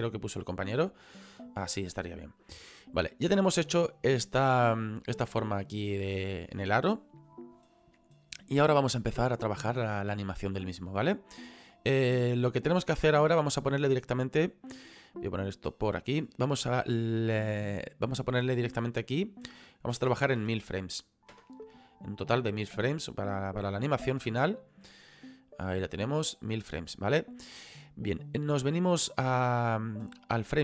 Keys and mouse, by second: 1.0 middle click, 11.9 click, 15.5 click, 18.8 click, 20.0 KP_1, 20.1 KP_0, 23.0 middle click, 24.9 middle click, 26.3 middle click.